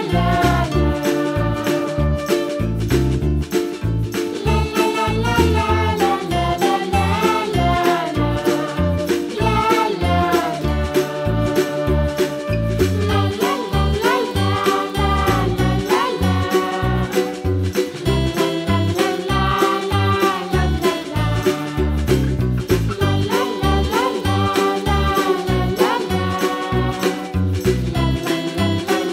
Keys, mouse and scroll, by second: 0.2 3, 0.4 click, 0.5 shift+click, 0.8 shift+click, 1.2 i, 2.2 e, 3.2 click, 3.4 middle click, 3.6 click, 4.3 2, 4.5 click, 4.7 middle click, 5.2 g, 7.5 click, 7.7 middle click, 8.1 click, 8.4 shift+click, 8.6 middle click, 9.1 g, 10.5 click, 10.9-11.9 scroll up 3, 11.9 middle click, 12.4 shift+click, 12.8 shift+click, 13.0 shift+click, 13.2 middle click, 13.6 click, 14.2 g, 15.3 middle click, 16.2 click, 16.4 middle click, 17.4 3, 17.7 click, 18.0 shift+click, 18.3 middle click, 18.7 e, 19.3 s, 20.4 middle click, 21.0 scroll down 1, 21.2 middle click, 21.9 e, 22.7 middle click, 23.2 click, 23.4 middle click, 24.3 alt+shift+click, 24.7 alt+shift+click, 25.8 ctrl+z, 26.5 shift+click, 26.9 shift+click, 27.5 shift+click, 27.7 shift+click, 28.1 shift+middle click, 28.3-28.8 scroll up 3, 28.8 shift+click.